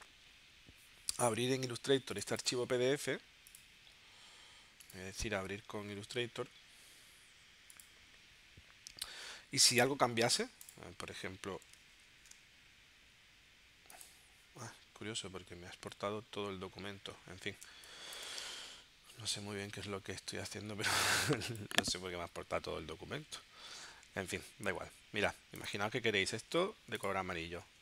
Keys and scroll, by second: 12.1 shift+super+g, 17.7 space, 24.9 i, 26.5 v.